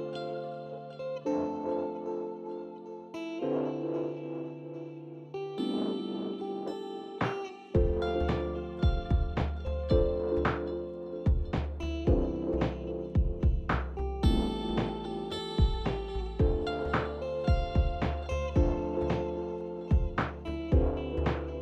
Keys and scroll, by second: 1.0 s, 12.9-13.8 typing.